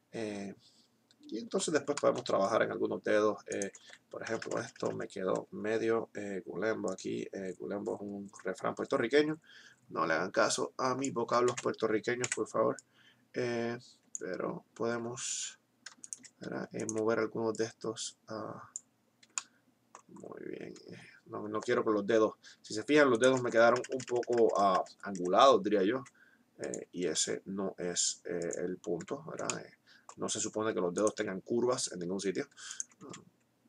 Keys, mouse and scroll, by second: 4.4 ctrl+KP_Add, 11.4 ctrl+z, 12.2 o, 12.7-14.7 drag, 15.9-17.4 right drag, 23.0 right click, 23.7 ctrl+KP_Add, 25.9 r, 26.7 g, 32.7 right click, 32.9 s.